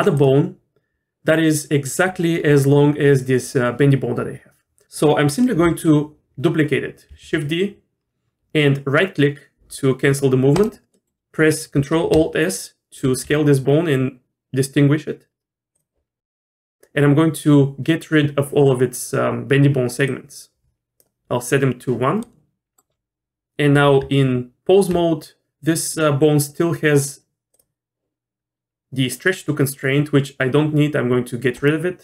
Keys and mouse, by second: 7.1 shift+d, 10.9 middle click, 13.0 ctrl+alt+s, 20.1 click, 22.2 middle click, 24.0 Tab, 31.5 click.